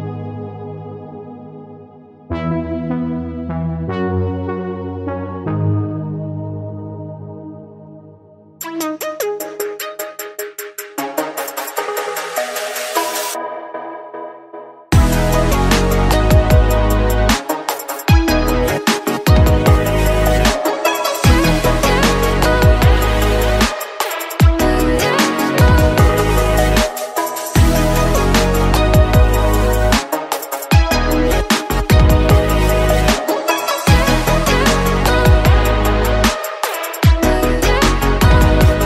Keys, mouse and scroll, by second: 0.2-0.5 drag, 4.3 click, 5.2 z, 5.9-7.2 middle drag, 7.2 drag, 9.2-10.4 drag, 10.6 click, 11.5-13.0 middle drag, 13.0 a, 13.5 middle click, 14.2 click, 15.5 middle click, 16.3 Tab, 16.5-17.8 right drag, 17.8 Tab, 19.1 KP_1, 19.8-20.2 scroll up 3, 20.4 click, 21.0 click, 23.7-25.0 shift+middle drag, 25.0 alt+shift+click, 26.4 shift+click, 26.9 shift+click, 27.7 click, 29.1-29.6 scroll down 1, 29.6-32.2 middle drag, 32.2 click, 32.6 alt+shift+click, 33.7 shift+click, 34.9 KP_1, 36.5 e, 37.5 click.